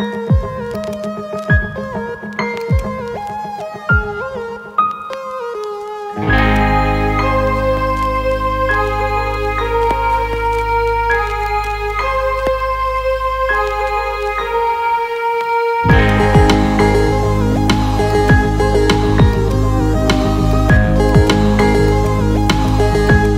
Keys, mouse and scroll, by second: 0.8-1.9 alt+middle drag, 2.6 alt+middle click, 6.3 alt+middle click, 11.5 click, 15.9 click, 18.2 click, 19.4 click, 20.5 alt+middle click, 21.1 ctrl+alt+middle click, 22.0 alt+middle click, 22.5 alt+shift+middle click, 23.1 ctrl+alt+middle click.